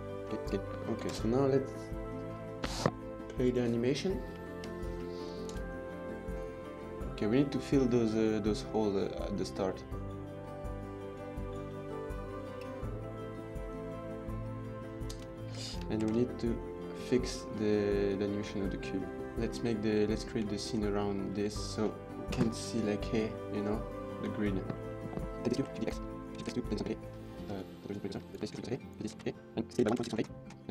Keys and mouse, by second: 0.0-0.9 typing, 3.1 click, 4.3 shift+middle click, 5.4 space, 14.9 space, 15.9 ctrl+s, 20.4 shift+drag, 21.3 drag, 22.2 KP_0, 24.5-24.9 middle drag, 25.6 shift+d, 25.7 x, 26.0 Tab, 26.2 click, 26.4 shift+s, 26.6 middle click, 26.8 Tab, 27.0 click, 27.1 Tab, 27.4 Tab, 27.5 click, 27.7 click, 28.1 click, 28.2 Tab, 28.3 click, 28.5-30.7 typing, 28.7 Tab, 30.2 KP_Enter.